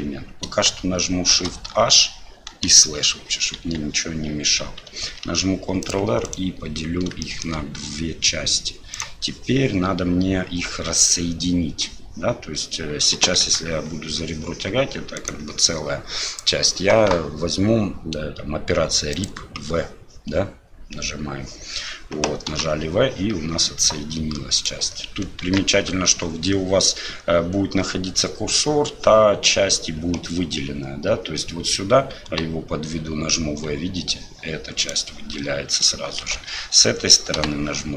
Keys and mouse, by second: 1.3 shift+h, 2.6 KP_Divide, 3.6 KP_1, 5.2 ctrl+r, 7.3 shift+click, 8.9 click, 19.2-21.5 drag, 22.5 v, 25.4 ctrl+z, 32.9 v, 36.2 ctrl+z, 37.4 v.